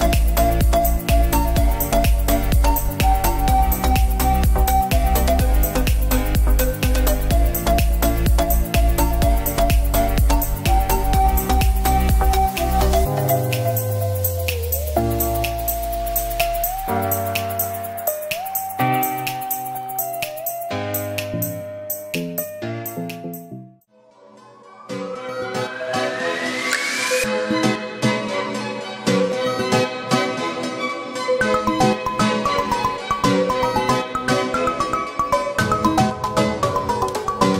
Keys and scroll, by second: 2.3 space, 7.8 space, 20.6 ctrl+j.